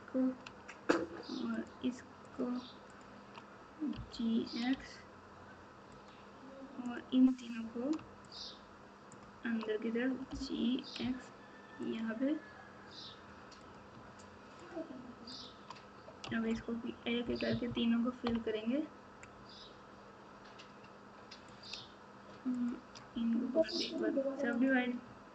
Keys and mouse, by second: 2.2 shift+click, 3.9 g, 6.8 click, 8.2 shift+click, 10.3 g, 13.6 click, 14.6 shift+click, 15.3 shift+click, 16.2 f, 17.6 KP_2, 18.2 KP_3, 21.5 click, 22.5 shift+click, 23.5 q, 24.6 click.